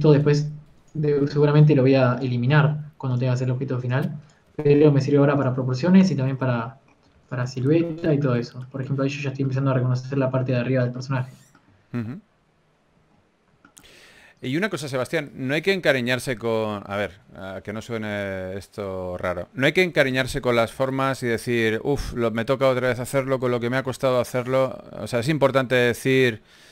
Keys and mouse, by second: 0.0 g, 0.0 r, 0.6 g, 1.1 e, 3.5 g, 4.3 g, 5.4 g, 8.6 ctrl+s, 8.6 a, 12.8 KP_1, 17.3 click, 22.5 s, 25.7 ctrl+s, 25.7 a.